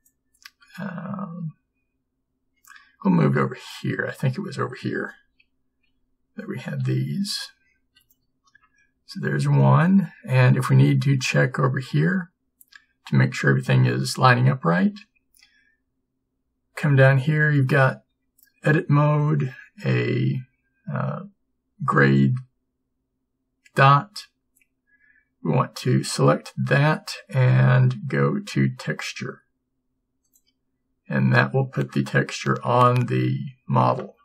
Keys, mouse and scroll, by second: 1.5 g, 6.0 p, 8.1 a.